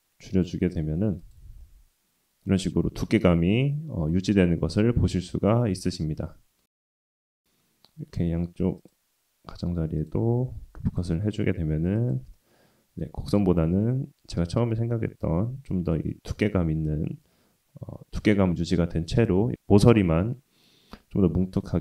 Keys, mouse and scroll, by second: 1.6-2.9 middle drag, 3.7 middle click, 3.7-4.3 scroll down 1, 4.6-7.4 middle drag, 8.1 ctrl+r, 10.5 ctrl+r, 12.3 middle click, 13.6 Tab, 14.5-15.2 middle drag, 15.7 shift+middle drag, 16.9-18.2 middle drag, 18.4-19.5 middle drag.